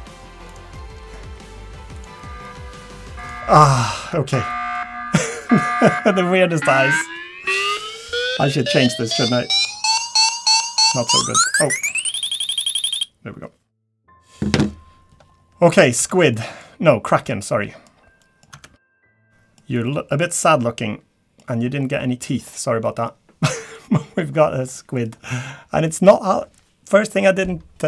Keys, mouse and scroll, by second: 0.7 middle click, 1.3 g, 2.2 middle click, 2.5 g, 3.5 middle click, 3.8-4.3 scroll down 3, 4.0 Tab, 4.5 middle click, 4.8-5.2 scroll up 3, 15.3-16.0 scroll down 4, 16.0 Tab, 16.3 middle click, 16.7-17.0 scroll down 1, 17.0-17.5 scroll up 4, 17.5 middle click, 17.9-18.2 scroll down 4, 18.2 middle click, 18.2 scroll up 1, 18.6 Tab, 18.9 a, 19.0 a, 19.2 middle click, 19.9 middle click, 21.5-22.0 scroll up 4, 22.0 middle click, 22.4-22.8 scroll down 3, 22.8 middle click, 23.1 scroll up 2, 23.4 scroll down 2, 23.8 middle click, 24.3-24.6 scroll up 4, 24.7 middle click, 25.1-25.6 scroll down 1, 25.9 middle click.